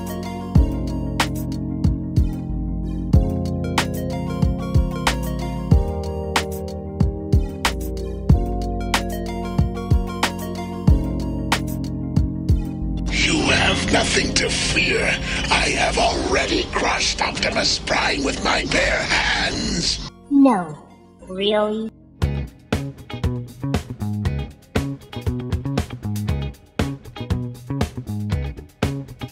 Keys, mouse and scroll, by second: 3.2-4.7 shift+middle drag, 10.9 m, 15.0 click, 22.8 click.